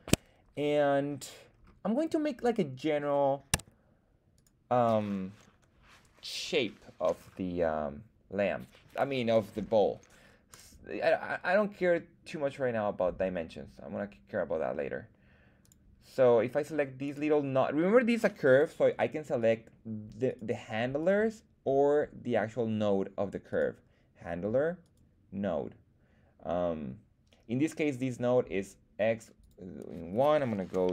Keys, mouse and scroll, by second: 1.5-2.9 scroll down 2, 3.5 Tab, 4.3 right click, 7.1 scroll up 2, 10.5 click, 15.6 click, 17.0 click, 17.0 right click, 19.4 click, 19.4 right click, 20.3 click, 20.3 right click, 21.0 click, 21.0 right click, 23.5 right click, 24.8 right click, 27.9 right click, 29.4-30.9 drag.